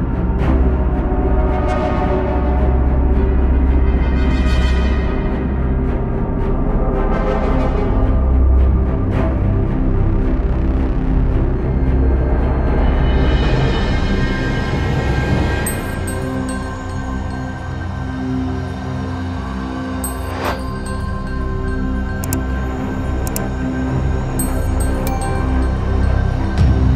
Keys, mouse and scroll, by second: 1.9-3.5 middle drag, 3.5 s, 4.8 KP_1, 5.4 middle click, 6.0 KP_3, 6.3-6.6 scroll up 3, 6.6 scroll down 1, 6.8 shift+middle click, 7.1-8.0 scroll up 1, 8.0 shift+z, 9.1 1, 9.3 click, 10.1 g, 11.3-12.2 scroll down 1, 12.2 Tab, 12.5-12.9 middle drag, 12.9 shift+z, 13.1 scroll down 1, 13.3-14.2 middle drag, 14.2 scroll up 1, 14.5-16.0 middle drag, 16.1 scroll down 1, 16.4-16.8 middle drag, 16.8 drag, 17.5 click, 17.7-19.3 middle drag, 19.6 scroll up 3, 19.7-21.2 middle drag, 21.4 scroll down 1, 21.6-26.9 middle drag.